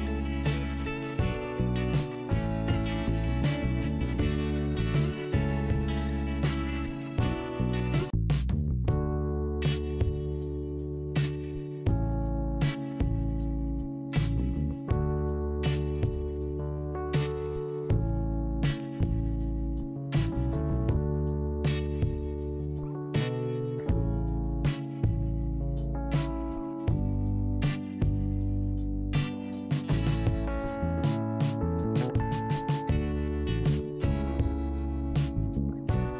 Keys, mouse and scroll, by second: 0.7 click, 1.8 click, 3.3 click, 4.7 click, 6.9 click, 8.3 click, 14.7 click, 15.0 click, 15.1 double click, 16.0 double click, 17.2 click, 19.4 click, 19.9 scroll down 1, 20.7 click, 22.7 click, 24.7 click, 24.8 click, 25.9 click, 29.0 click, 29.1 click, 30.2 scroll up 1, 30.7 click, 31.8 click, 33.7 click, 35.3 click.